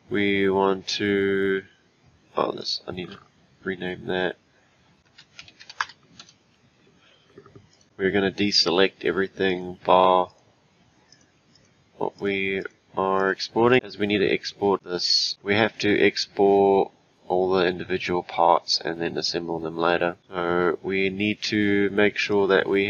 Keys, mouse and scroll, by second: 2.6 click, 3.7 F2, 5.0 BackSpace, 7.7 click, 9.5 click, 10.3 click, 11.1 click, 11.5 click, 12.2 click, 12.6 click, 13.2 click, 22.3 click.